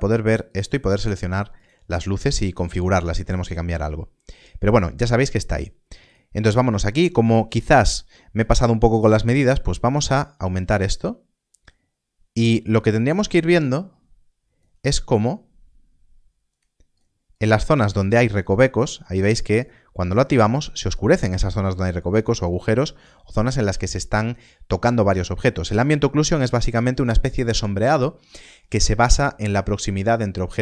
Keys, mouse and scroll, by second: 0.4 click, 9.2 click, 9.6 shift+click, 16.4 click.